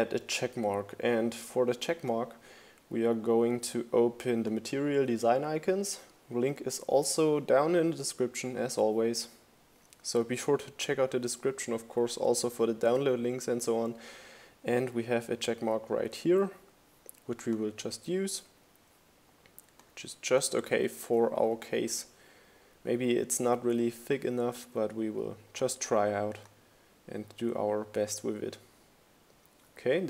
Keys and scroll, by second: 19.2 super+c, 21.8 super+v.